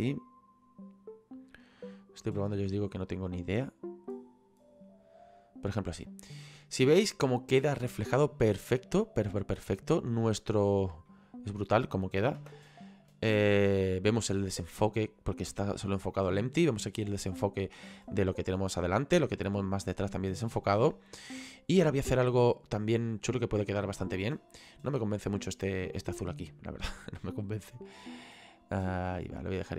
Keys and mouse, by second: 11.2 middle click, 12.5 KP_0, 22.5 shift+middle click, 24.8 right click, 26.0 click, 27.4 click, 29.6 middle click.